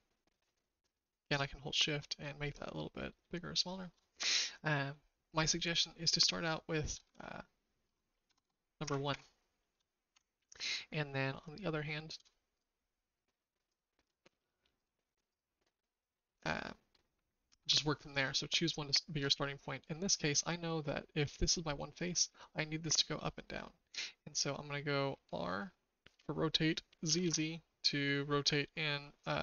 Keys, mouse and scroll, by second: 3.2 shift+middle click, 6.1 shift+middle click, 7.0 Tab, 8.2-8.8 typing, 9.1 KP_Enter, 10.6 Tab, 10.6-12.2 shift+middle drag, 12.5 click, 13.6 click, 14.8 click, 15.2 click, 16.4-17.6 shift+middle drag, 18.8 shift+click, 23.9 r.